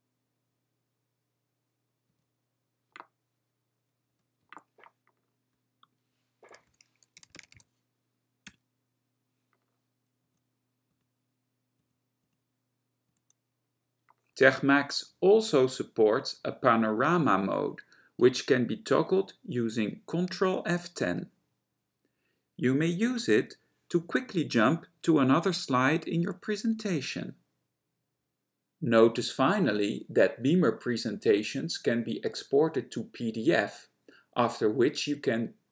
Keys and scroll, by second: 2.3 F11, 6.6-7.7 typing, 8.6 Return, 10.3 F11, 11.0 F11, 11.9 F11, 12.3 F11, 13.1 F11, 26.6 ctrl+F10.